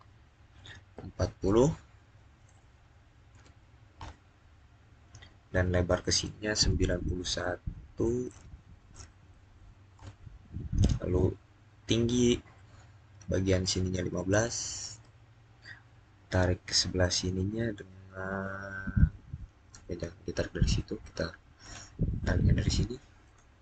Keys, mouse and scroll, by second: 1.9-3.2 middle drag, 3.2 typing, 3.8 Return, 7.9-8.5 typing, 9.8 Return, 13.8 Return, 13.9-14.7 typing, 14.8 Return, 21.5 Return.